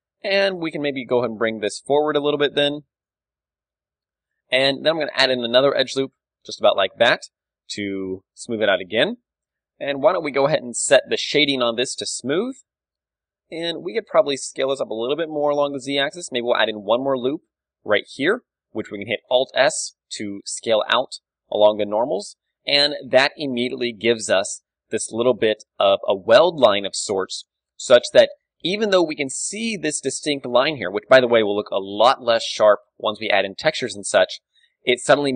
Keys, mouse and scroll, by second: 0.3 right click, 0.7 KP_3, 1.1 g, 1.3 click, 3.1 click, 3.2 Tab, 4.0 Tab, 4.5 z, 4.9 ctrl+r, 6.7 click, 6.7 z, 6.9 Tab, 7.1-8.3 middle drag, 7.5 click, 8.4-10.8 middle drag, 9.6 t, 10.8-12.3 drag, 11.5 t, 12.3 KP_3, 13.1 Tab, 13.4 z, 13.6 a, 14.0-15.7 right drag, 14.4 s, 15.7-17.8 drag, 15.8 a, 16.6 ctrl+r, 18.3-20.6 drag, 18.4 z, 18.9 alt+s, 21.7 click, 22.0 Tab, 22.5-27.4 middle drag, 23.3 a, 27.7-29.8 middle drag, 29.5 d, 29.8-32.3 drag, 30.8 d, 32.3 d, 32.4-34.7 right drag, 33.9 d, 34.7-35.3 middle drag.